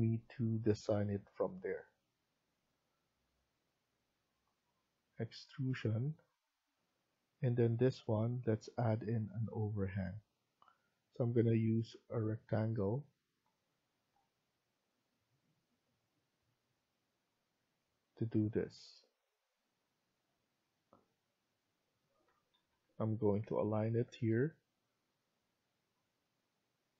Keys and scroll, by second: 22.2 Escape, 22.4 Escape, 23.7-24.4 typing.